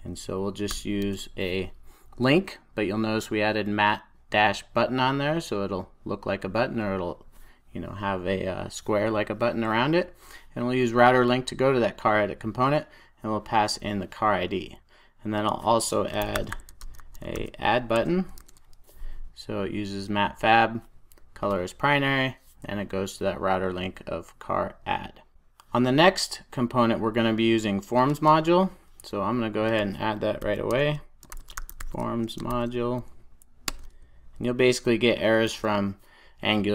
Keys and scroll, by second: 17.4 super+j, 18.3 Return, 22.3 super+s, 34.7 Return, 35.4 super+s.